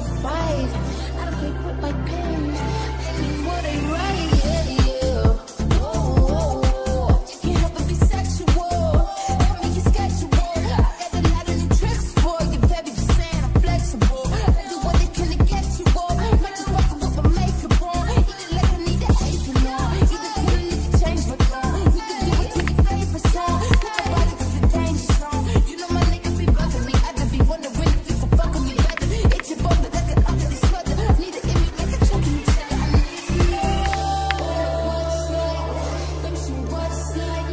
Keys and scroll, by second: 22.6 1, 23.9 typing, 28.9 1, 33.9-34.2 typing, 35.2-36.0 typing.